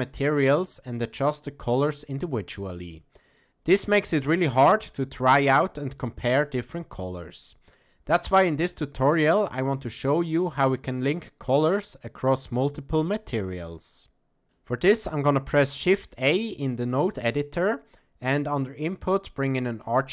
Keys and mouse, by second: 11.7-12.7 drag, 13.2 click, 16.0 shift+a.